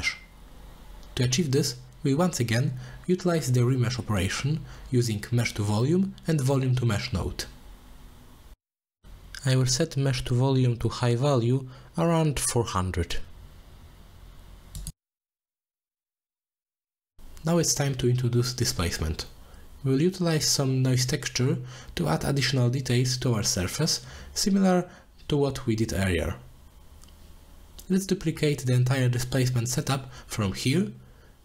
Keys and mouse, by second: 0.0 shift+a, 1.4 middle click, 1.9 middle click, 3.1 click, 4.1 middle drag, 4.5 shift+d, 5.4 middle click, 6.0 g, 6.9 click, 7.9-8.8 drag, 9.7-10.7 drag, 10.5 0, 11.1 drag, 12.2-13.6 drag, 16.5 middle click, 18.7 middle drag, 19.4 click, 20.6 z, 21.1-21.5 middle drag, 21.6 z, 22.1 middle click, 23.6 drag, 24.0 drag, 24.6 click, 25.3 alt+shift+click, 25.8 z, 28.8 z, 29.2 click, 30.3 click, 31.1 middle click.